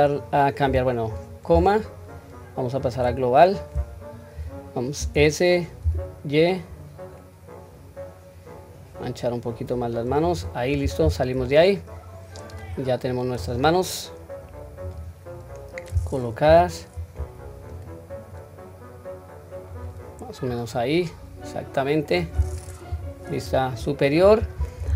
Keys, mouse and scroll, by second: 0.6-1.6 scroll up 2, 11.0 Tab, 11.4-11.8 scroll down 1, 11.8-12.5 middle drag, 13.1 scroll down 1, 13.4 click, 14.8 click, 16.4 KP_1, 17.7 click, 17.9-19.8 drag, 20.5-22.1 middle drag, 22.9 KP_7, 23.4-24.8 scroll up 1.